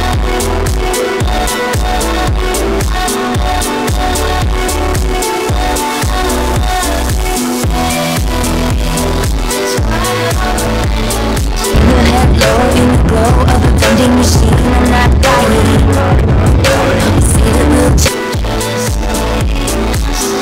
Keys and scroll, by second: 18.5 Page_Down.